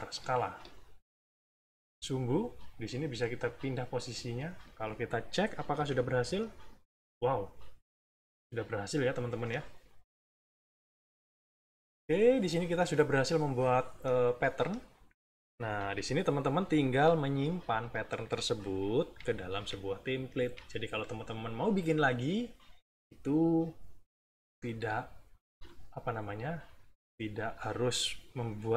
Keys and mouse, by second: 2.5-4.5 drag, 4.7 middle click, 5.7 =, 6.6 middle click, 7.2 -, 7.7 middle click, 7.8 click, 8.9 click, 9.5 click, 10.1 click, 10.7 click, 11.8 click, 13.7 click, 14.7 click, 15.7 -, 17.4 Escape, 17.7 click, 18.2 middle click, 19.0 -, 20.0 middle click, 20.4 =, 22.9 click, 26.4 middle click.